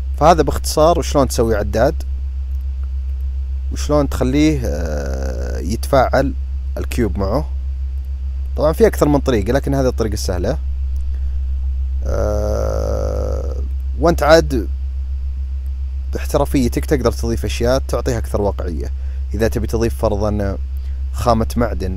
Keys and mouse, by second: 2.8 click, 7.7 drag, 8.2 click, 10.1 click, 13.5 click, 15.3-16.6 drag.